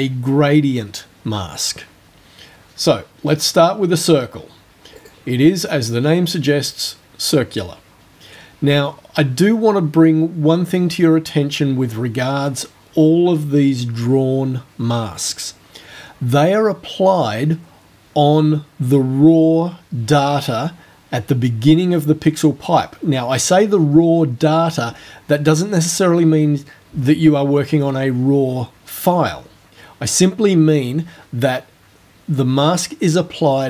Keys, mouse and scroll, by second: 5.0 click, 8.9 scroll down 2, 9.6-10.4 scroll down 2, 11.8-12.5 scroll down 2.